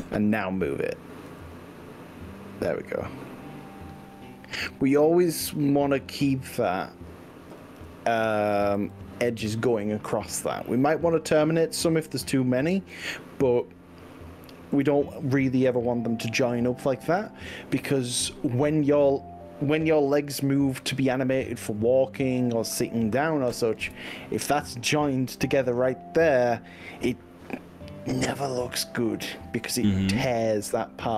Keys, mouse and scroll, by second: 1.4 g, 5.4 click, 5.6-6.8 middle drag, 7.6 click, 8.8 g, 12.7 z, 14.8 click, 15.7-16.7 middle drag, 17.2 click, 18.2 g, 23.7 click, 23.9 ctrl+z, 29.4 click, 30.3 middle click, 30.4 click.